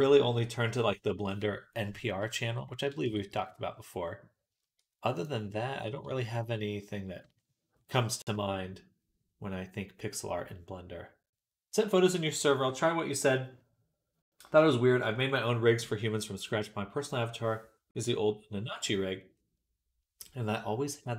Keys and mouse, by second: 2.5 middle click, 2.9 Tab, 3.2 shift+click, 3.5 middle click, 4.4 shift+click, 4.5-5.7 middle drag, 5.0 click, 5.0 right click, 6.3 click.